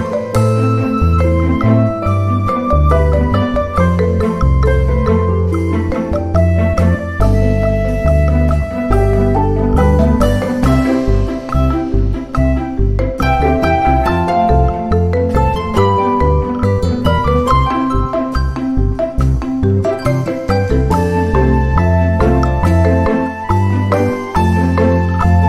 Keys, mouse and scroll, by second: 0.5 click, 1.7-3.7 drag, 4.6 shift+click, 5.7 shift+d, 6.7 click, 7.9 click, 9.0-9.5 ctrl+scroll up 2, 9.6 ctrl+click, 10.8 click, 11.5-13.1 ctrl+shift+drag, 13.5-14.6 ctrl+shift+drag, 15.0-16.9 ctrl+shift+drag, 17.4 ctrl+shift+click, 18.3 ctrl+d, 18.7 ctrl+click, 19.8-21.1 ctrl+shift+drag, 21.3 ctrl+shift+click, 22.1 ctrl+click, 23.5 ctrl+click, 24.3-25.4 ctrl+drag.